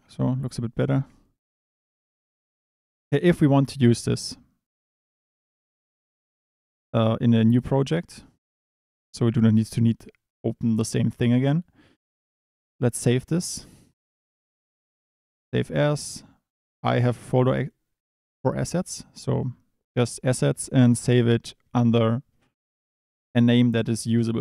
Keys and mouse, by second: 0.1 Tab, 0.3 click, 1.0 ctrl+s, 1.8 click, 9.4 click, 11.1 click, 12.7-15.8 drag.